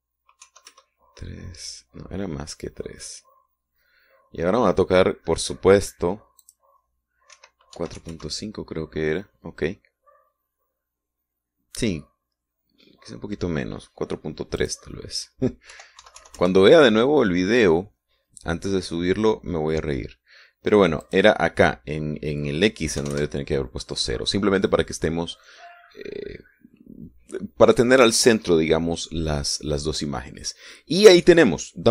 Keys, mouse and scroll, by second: 1.5 KP_3, 1.8 KP_Enter, 7.5 click, 8.5 KP_4, 8.9 KP_Decimal, 9.1 KP_5, 9.3 KP_Enter, 10.9-11.3 scroll up 1, 15.7 click, 16.9 KP_4, 17.1 KP_Decimal, 17.3 KP_3, 17.5 KP_Enter, 22.2 click, 24.1 KP_0, 24.3 KP_Enter, 30.4-30.9 scroll down 1, 31.3-31.6 scroll up 1.